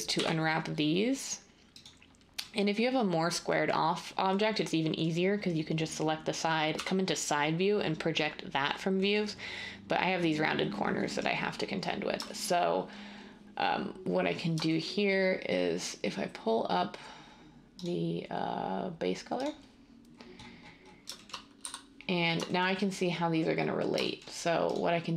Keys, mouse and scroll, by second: 0.1 u, 6.7 3, 21.6 a.